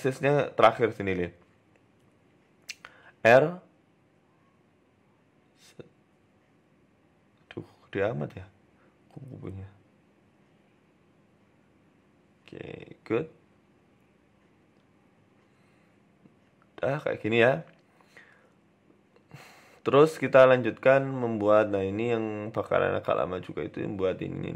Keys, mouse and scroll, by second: 0.1 shift+middle click, 0.8 KP_3, 1.6 z, 2.8 scroll up 3, 3.1-3.6 scroll down 3, 3.4 r, 4.9 r, 6.2 KP_0, 6.7-7.4 scroll up 5, 6.8 z, 7.4 middle click, 7.6-8.2 scroll up 6, 8.2 shift+middle click, 8.8 s, 10.0 t, 12.8 middle click, 12.8 g, 14.1 scroll down 2, 14.3 middle click, 15.7 scroll up 3, 15.9-16.3 scroll down 4, 16.1 middle click, 16.9 middle click, 18.8 scroll down 3, 19.0 shift+a, 20.6 shift+a, 23.9 KP_1, 24.3 shift+scroll down 1, 24.3 shift+middle click.